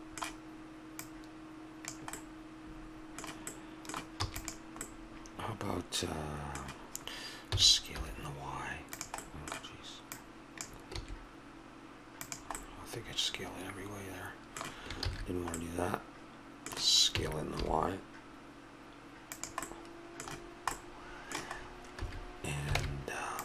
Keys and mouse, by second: 1.0-2.1 drag, 2.1 middle click, 4.2 e, 7.5 s, 9.2 middle click, 10.1-11.9 drag, 11.0 s, 12.6 middle click, 15.0 ctrl+z, 17.1 s, 22.0 a, 22.8 ctrl+Tab.